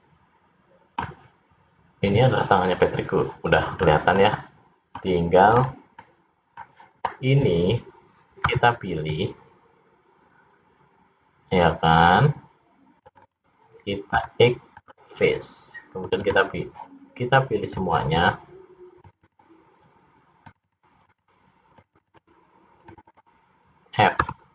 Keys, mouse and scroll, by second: 3.9-4.3 scroll up 3, 4.3 middle click, 5.7 scroll up 2, 6.1 middle click, 8.5 c, 14.2 x, 16.1 click, 16.4 click, 17.7 click, 19.1 click, 19.4 click, 20.5 click, 20.9 click, 21.2 click, 21.9 click, 22.2 click, 22.4 click, 23.3 click, 24.4 f.